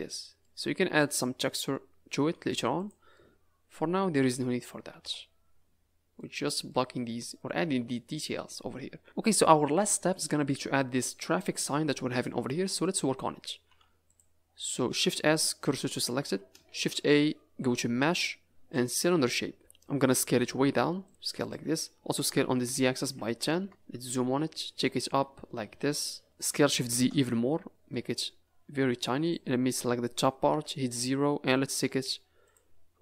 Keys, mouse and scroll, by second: 0.0 middle click, 0.7 middle click, 1.4 middle click, 2.7 click, 3.1 middle click, 4.8 a, 5.0 a, 5.2-5.9 scroll down 10, 6.1 middle click, 10.3 scroll down 2, 11.9 middle click, 12.8 click, 13.6 Tab, 14.0 click, 15.1 shift+s, 16.1 Tab, 16.6 shift+a, 20.1 s, 21.2 s, 22.4 s, 23.7 KP_Decimal, 24.0 scroll down 4, 24.8 click, 26.5 s, 27.9 middle click, 28.4 scroll up 5, 28.7 Tab, 29.2 click, 29.8-30.5 scroll down 1, 30.5 KP_0, 31.5-32.0 scroll down 4, 32.0 z, 32.8 scroll up 2.